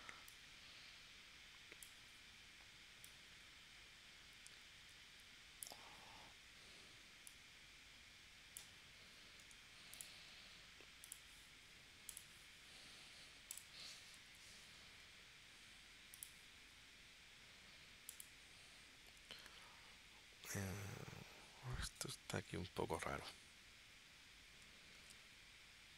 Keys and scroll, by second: 9.4 a, 14.3 p, 24.9 super+z.